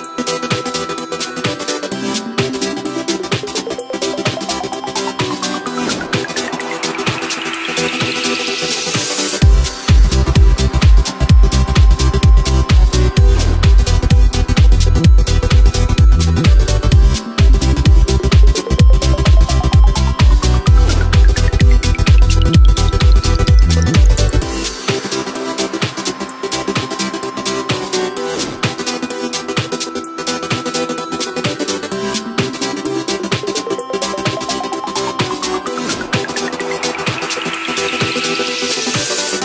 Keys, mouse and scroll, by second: 1.5 g, 3.9-4.4 scroll down 2, 4.4 shift+d, 4.8 g, 7.0 s, 10.8 KP_1, 11.9-12.5 scroll up 1, 12.5 click, 12.8 shift+a, 14.0 s, 15.3 x, 15.7 shift+a, 19.1 s, 21.2 s, 23.5 s, 25.6 r, 28.0-28.8 scroll up 2, 28.8 KP_3, 29.5-30.2 scroll down 1, 30.2-31.4 shift+middle drag, 31.4 g, 34.1 middle click, 34.5 Tab, 35.0 middle click, 35.5 scroll up 1, 35.8 3, 36.1 right click, 36.6 right click, 37.6 KP_3, 37.9-38.7 scroll down 2, 38.7 g.